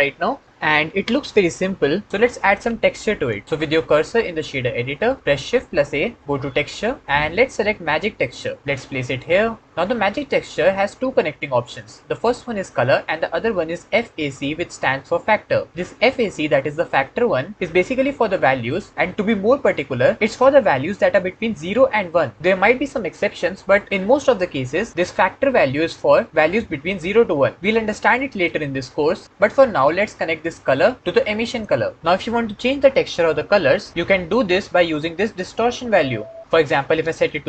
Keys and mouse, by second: 5.3 shift+a, 31.0 click, 36.5 click.